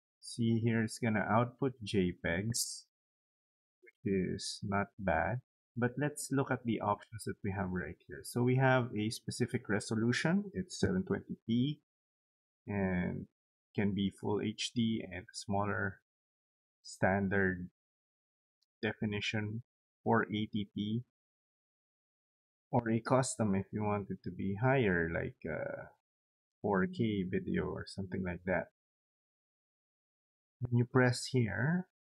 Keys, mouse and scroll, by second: 0.1-1.6 drag, 2.6 click, 5.4 click, 12.2 click, 28.9 click, 31.7 click.